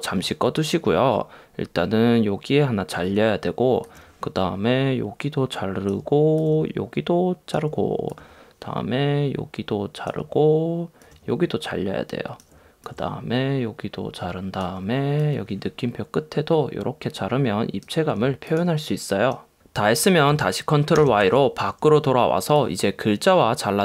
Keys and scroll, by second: 21.0 super+y.